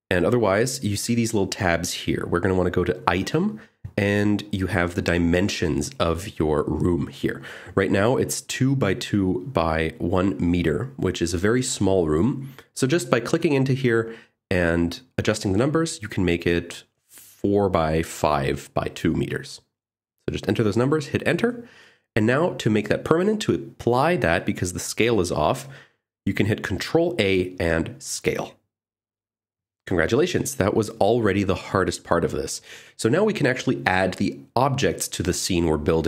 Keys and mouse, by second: 0.2 click, 1.0 click, 1.9 click, 4.0 click, 15.0-20.1 drag, 23.0 middle click, 28.6 ctrl+a.